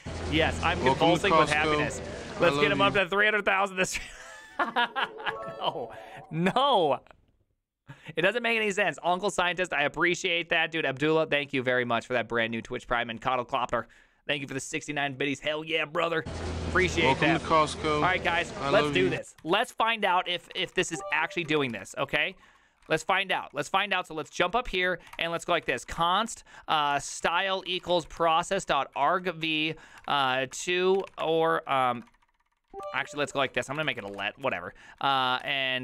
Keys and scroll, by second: 20.3-21.6 typing, 21.8 ctrl+u, 21.8 Return, 22.5 ctrl+u, 22.8 ctrl+c, 22.9 ctrl+:, 23.0 w, 23.3 Return, 23.3 ctrl+d, 23.4 ctrl+d, 24.1-35.8 typing.